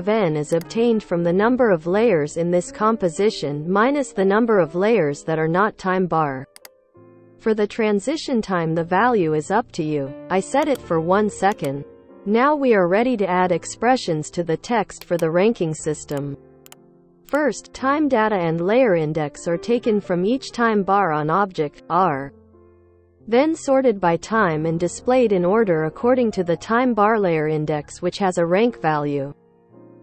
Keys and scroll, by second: 2.9-6.4 typing, 11.3 1, 15.7 ctrl+v.